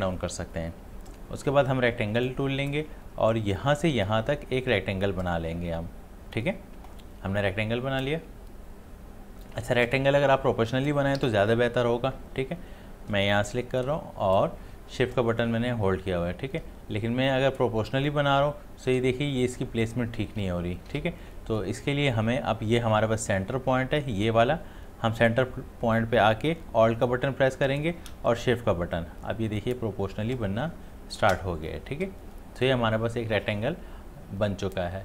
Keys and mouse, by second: 2.2-11.2 drag, 11.2 ctrl+z, 13.5-20.9 drag, 20.9 ctrl+z, 26.9 ctrl+z, 27.1-35.0 alt+drag.